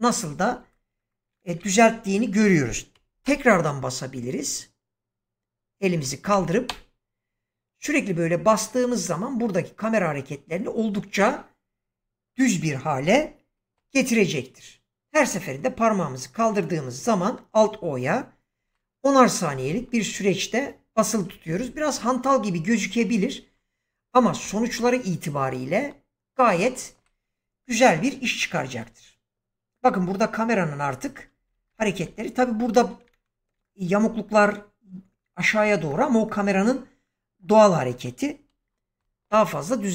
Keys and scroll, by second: 3.1 alt+o, 3.6 alt+p, 6.6 alt+o, 13.6 alt+o, 38.9 alt+o.